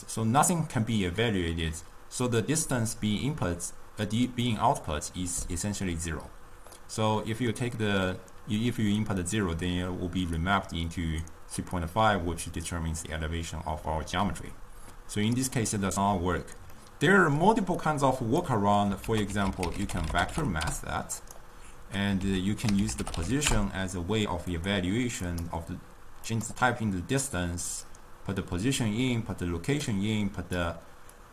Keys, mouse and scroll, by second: 7.0-10.0 middle drag, 11.1-14.1 drag, 17.0-18.4 middle drag, 18.4 click, 19.2 ctrl+a, 25.3-29.2 drag, 30.5 click.